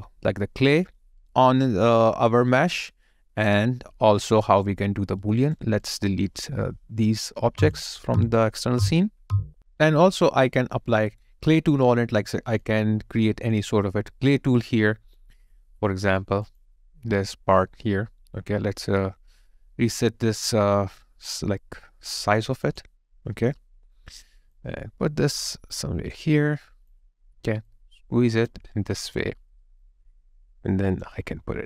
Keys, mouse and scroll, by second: 5.2 alt+right click, 28.7 alt+right click.